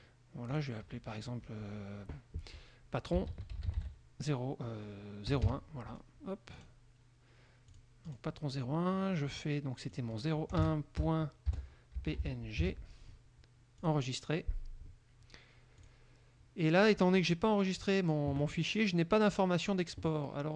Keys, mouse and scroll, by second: 0.7 click, 3.2-5.7 typing, 6.7 click, 7.9 click, 8.3 click, 10.1 click, 10.7-13.3 typing, 14.0 click, 15.9 click.